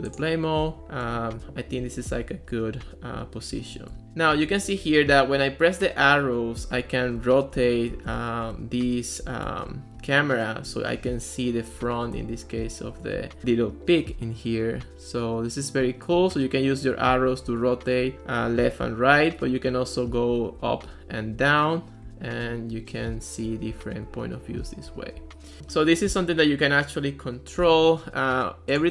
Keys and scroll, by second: 0.5-5.0 typing, 2.8 Right, 5.4 Left, 6.1 Right, 6.8 Left, 7.0-10.0 typing, 11.0 Left, 11.1 Right, 11.9 a, 12.2 s, 12.6 Right, 13.2 Left, 16.2 Right, 17.5 Left, 18.6 Right, 18.8 Left, 20.3 Up, 20.9 Down, 22.1 Up, 22.5 Down, 23.0 Right, 23.7 Down, 24.3 Up, 25.2 Left.